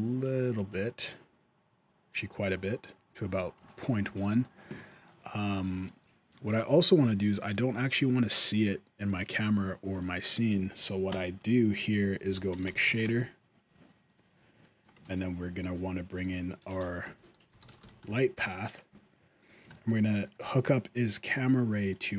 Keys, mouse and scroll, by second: 3.4 shift+scroll up 1, 3.7 shift+middle click, 3.8-4.2 scroll down 1, 5.4 shift+middle click, 6.2 click, 6.6 g, 7.2 click, 7.3 g, 8.1 shift+middle click, 9.8 middle click, 10.4 shift+a, 14.4 shift+middle click, 14.8 shift+a, 19.5 shift+middle click, 20.0 click, 20.2 g, 21.1 click.